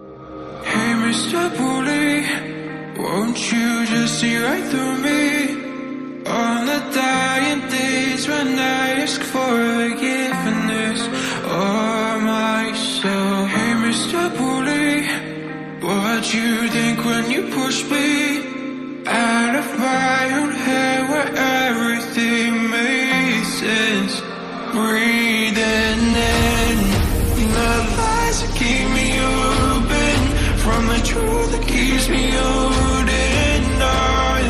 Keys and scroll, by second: 24.8 ctrl+i, 29.2 ], 29.6 ].